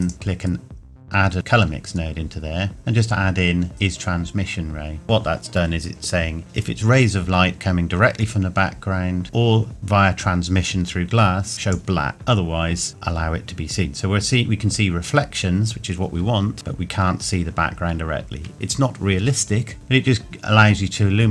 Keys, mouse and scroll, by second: 11.5 click, 13.3-13.6 scroll down 1, 16.5-18.2 scroll down 1.